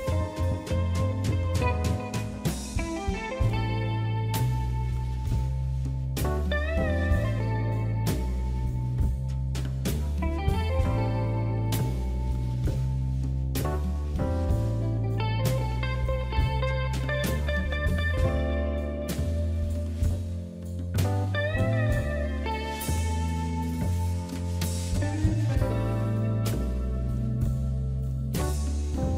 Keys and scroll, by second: 6.0 w.